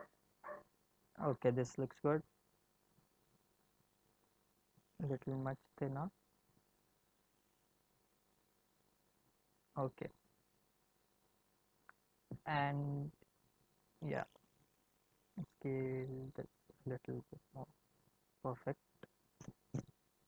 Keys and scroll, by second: 6.0 s, 7.5 x, 15.2 s.